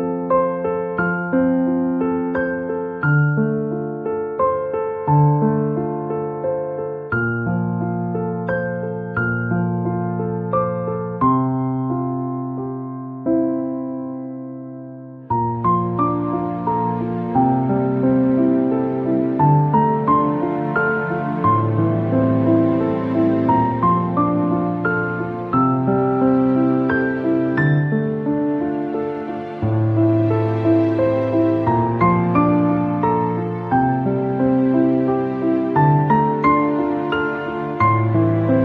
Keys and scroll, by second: 4.3 KP_0, 4.8 Return, 6.0 Delete, 12.0 ctrl+d.